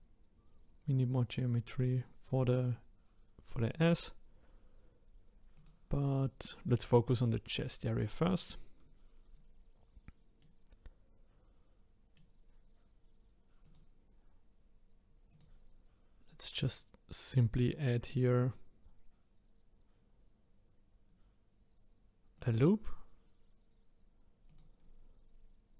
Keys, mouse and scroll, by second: 1.3-2.7 middle drag, 3.5 click, 5.5 click, 10.4-13.4 middle drag, 13.6 click, 15.3-18.5 drag, 22.3-25.7 drag.